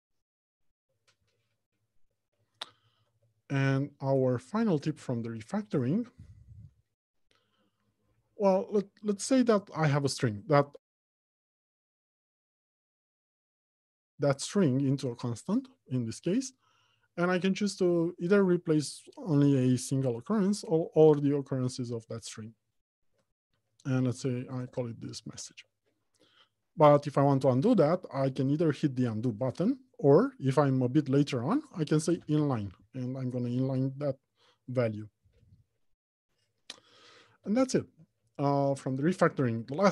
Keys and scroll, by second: 3.6 alt+Home, 3.8 Left, 4.4 Return, 9.8 ctrl+alt+shift+t, 15.8 ctrl+alt+c, 29.9 ctrl+alt+shift+t, 32.2 ctrl+alt+n, 37.7 alt+Home, 38.3 Left, 39.0 Return.